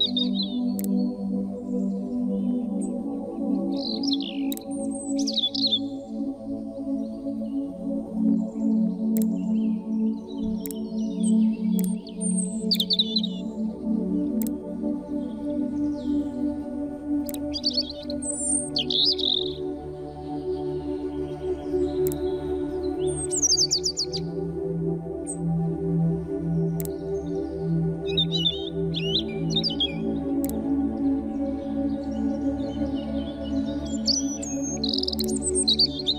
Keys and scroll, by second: 19.2 ctrl+c, 20.5 ctrl+f, 33.6 shift+m.